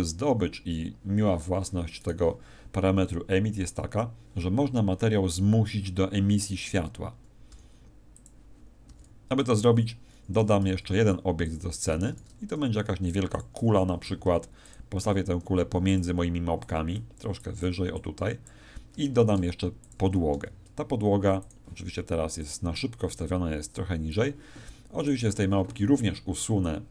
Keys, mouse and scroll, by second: 2.0 right click, 7.4 r, 8.2 click, 8.8 r, 9.4 click, 10.4 r, 11.5 click, 12.0 shift+a, 14.0 s, 14.7 click, 15.0 g, 15.9 click, 16.6 click, 17.4 click, 17.9 click, 19.2 shift+a, 20.3 s, 21.4 click, 22.4 click, 25.0 right click.